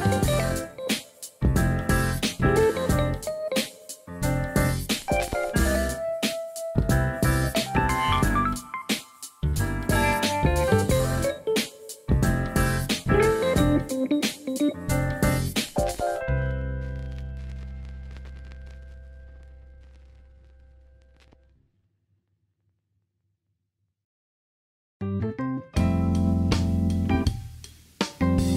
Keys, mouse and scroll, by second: 5.2 ctrl+r, 5.6 click, 6.2 ctrl+b, 8.0 s, 9.1 ctrl+z, 10.5 ctrl+z, 10.5 s, 12.3 ctrl+b, 15.4 middle click, 16.1 alt+z, 16.4 middle click, 17.0 middle click, 18.5 ctrl+r, 20.3 Tab, 20.5 right click, 21.3-21.6 middle drag, 21.7 alt+z, 22.0 alt+z, 22.2-23.7 middle drag, 24.0 shift+middle drag, 24.4 middle drag, 25.0 KP_1, 26.0-26.6 middle drag, 27.4 ctrl+s.